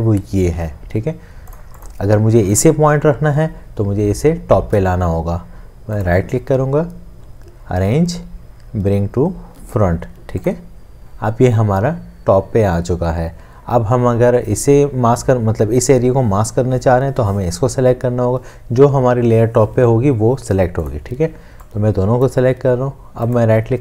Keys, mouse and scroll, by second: 6.1 right click, 23.3 right click.